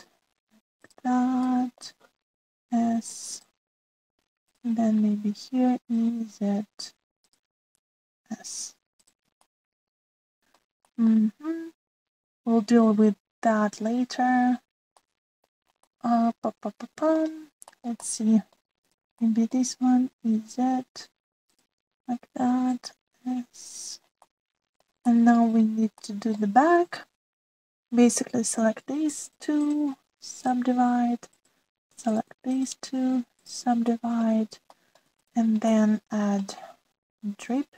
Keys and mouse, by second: 0.1 e, 2.4 shift+middle click, 3.2 s, 6.4 e, 8.7 s, 10.5-11.6 drag, 11.9 shift+click, 15.9 click, 16.8-18.1 middle drag, 18.7 shift+middle click, 19.1 middle click, 20.2 middle click, 21.0 e, 23.1 s, 25.3 middle click, 26.0 shift+middle click, 27.0 shift+middle click, 28.5 click, 30.2 shift+click, 31.4-32.4 drag, 33.5-34.5 drag, 34.8 middle click, 35.0 click, 35.7 shift+middle click, 36.7 click, 36.9 middle click.